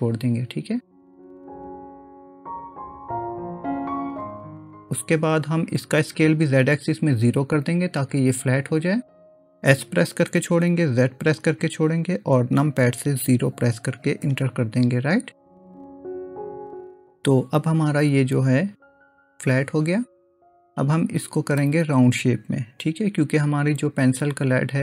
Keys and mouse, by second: 1.2 middle click, 10.3 s, 19.1-21.6 middle drag, 24.5 click.